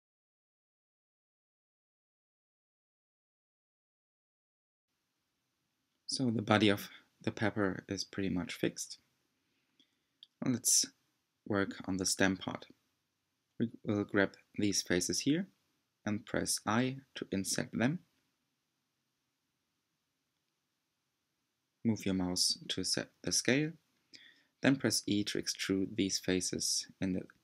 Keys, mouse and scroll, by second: 3.8-5.5 middle drag, 5.5 click, 6.0-9.0 middle drag, 9.7-15.7 middle drag, 15.7 c, 18.3 i, 24.5-26.4 middle drag, 26.4 e.